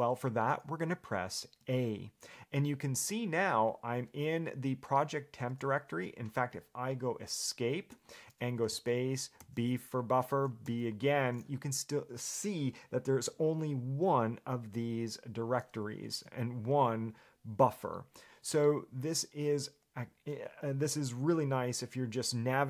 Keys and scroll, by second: 1.8 a, 8.1 Escape.